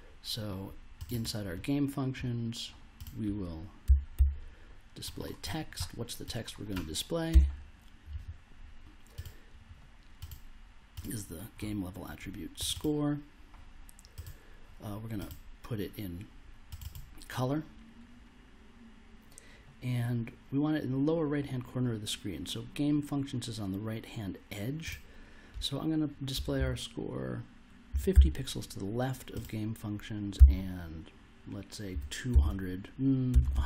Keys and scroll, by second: 3.6-4.6 typing, 7.3 BackSpace, 26.3 BackSpace, 26.5 -, 27.6-28.6 typing, 30.3 -, 31.9 2, 32.3 0, 33.3-33.6 typing.